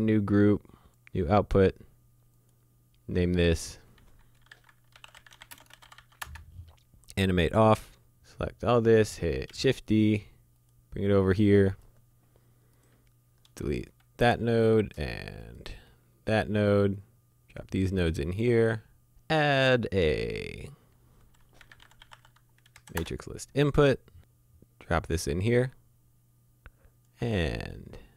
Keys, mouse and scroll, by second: 4.5-5.9 typing, 6.2 Return, 7.7 scroll down 1, 7.9 middle click, 8.1 click, 9.5 d, 10.6 click, 13.8 Delete, 14.5 click, 15.9 Delete, 17.0 click, 18.2 click, 20.7 click, 21.6-22.1 typing, 22.7 Down, 23.0 Return, 24.2 click.